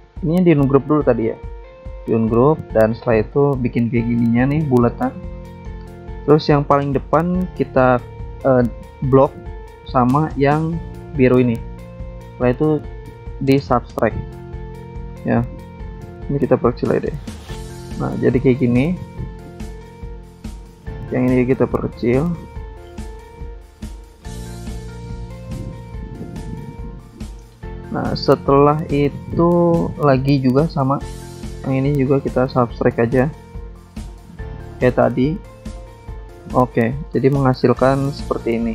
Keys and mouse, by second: 1.2 click, 3.5 click, 4.8 alt+Tab, 6.3 alt+Tab, 7.7 click, 8.5 click, 10.3 click, 12.0 click, 12.7 click, 13.6 click, 14.4 click, 15.4 click, 16.9 click, 17.4 click, 17.5 double click, 19.4 click, 21.3 ctrl+click, 23.4 click, 24.4 click, 30.6 click, 31.6 ctrl+click, 35.5 ctrl+click, 37.8 click, 37.9 double click.